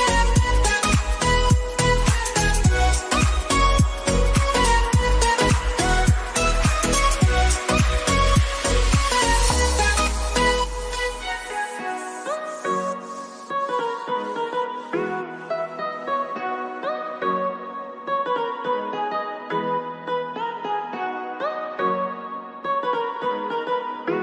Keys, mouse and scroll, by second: 2.4 click, 5.6 click, 9.2 ctrl+x, 11.1-13.2 drag, 13.2 click, 16.4 click, 18.3 click, 22.1-24.2 drag.